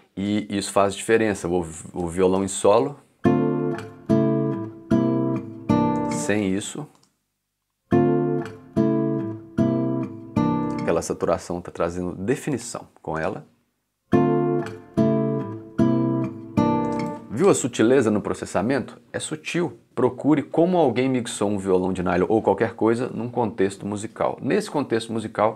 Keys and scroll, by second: 0.2 c, 2.4 shift+space, 6.0 space, 10.6 space, 13.1 space.